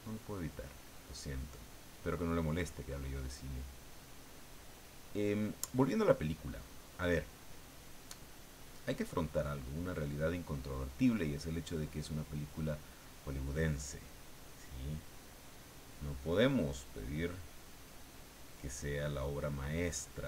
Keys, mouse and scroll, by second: 1.0-7.6 drag, 11.8-12.9 middle drag, 14.6-20.2 drag.